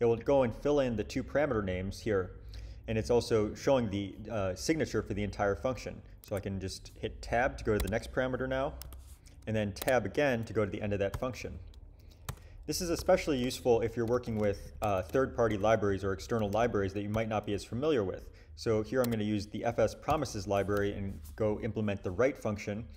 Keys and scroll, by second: 6.2 1, 7.7 Tab, 8.8 2, 9.8 Tab, 11.1 ;, 12.2 Return, 12.9 Return, 13.0-14.8 typing, 14.4 shift+Up, 15.4 Return, 16.2-17.1 typing, 19.0 Tab, 20.1-21.2 typing.